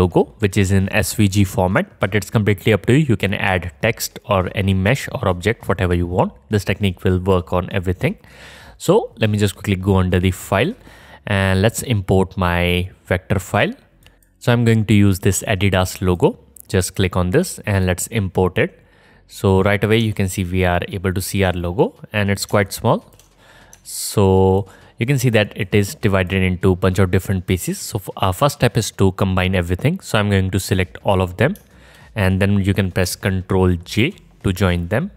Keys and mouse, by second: 10.5-11.8 drag, 19.5-25.6 drag, 25.6-26.2 middle drag, 26.2-27.0 drag, 27.0-27.4 middle drag, 27.4 click, 27.5-28.7 middle drag, 28.7 click, 28.8-30.0 middle drag, 30.0-34.7 drag, 34.0 ctrl+j.